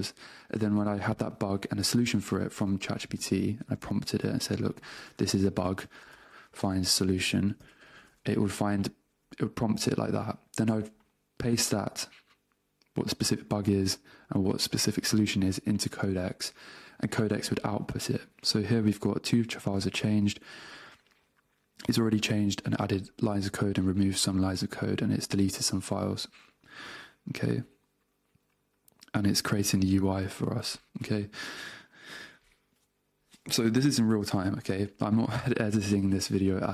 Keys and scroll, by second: 3.2 super+space, 4.1 Return, 5.2 space, 6.6 space, 8.0 Return, 15.5 super+Tab, 31.3 super+Tab, 34.7 super+Tab.